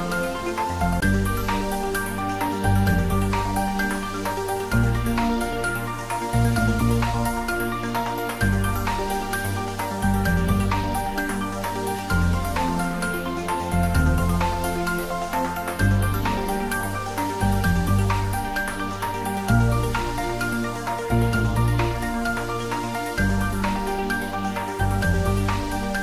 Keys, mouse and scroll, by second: 2.7 click, 3.3 ctrl+r, 4.1 click, 5.6 s, 8.1 click, 8.3 middle click, 9.2 g, 9.6 z, 11.2 click, 11.5 middle click, 12.2 Tab, 12.7 middle click, 13.7 ctrl+r, 14.7 Tab, 15.1-18.5 middle drag, 18.5 Tab, 20.4 ctrl+r, 24.0 click.